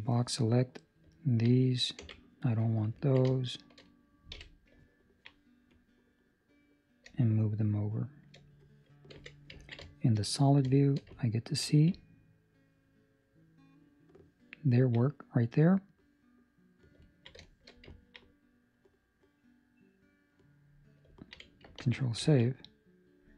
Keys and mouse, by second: 1.1 ctrl+middle click, 1.9 c, 2.9 ctrl+middle click, 3.2 middle click, 4.3 KP_3, 4.8 ctrl+middle click, 5.7 click, 9.5 z, 9.5 ctrl+middle click, 10.1 shift+middle click, 10.1 middle click, 10.7 shift+middle click, 11.1 ctrl+middle click, 12.0 ctrl+middle click, 12.1 shift+middle click, 15.0 middle click, 17.0 ctrl+middle click, 17.4 shift+middle click, 17.9 ctrl+middle click, 18.2 middle click, 21.1 ctrl+middle click, 21.7 ctrl+s, 22.2 ctrl+middle click, 22.4 middle click.